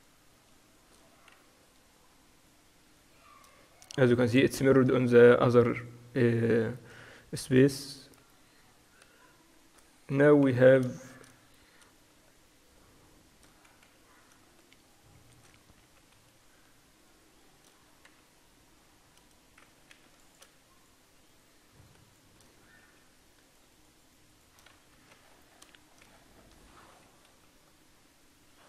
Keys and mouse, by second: 1.4 f, 3.9 f, 7.4 f, 10.2 f, 11.0-13.6 middle drag, 13.6-19.3 right drag, 13.9 f, 16.0 f, 19.3 a, 19.9 ctrl+r, 20.9-22.9 right drag, 22.9 f, 23.5 right click, 25.1 f, 25.7 click, 27.3 KP_4, 27.6 KP_4, 28.0 KP_4, 28.3 KP_4.